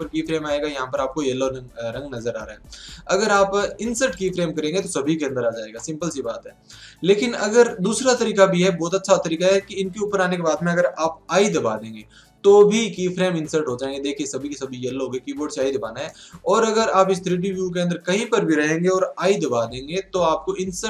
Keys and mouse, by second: 2.6 ctrl+z, 3.2 click, 5.8 ctrl+z, 11.3 i, 14.6 ctrl+z, 16.1-19.6 middle drag, 19.2 i.